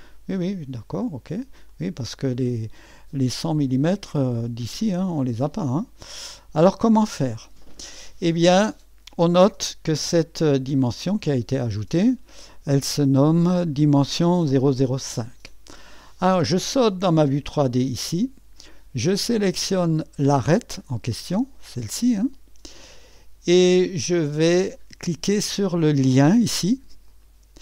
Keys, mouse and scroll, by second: 1.7-3.2 drag, 4.6-5.8 drag, 11.0 click, 12.1-12.6 drag, 17.4 click, 20.3 click, 21.2-23.4 drag, 24.6 click, 27.1 click.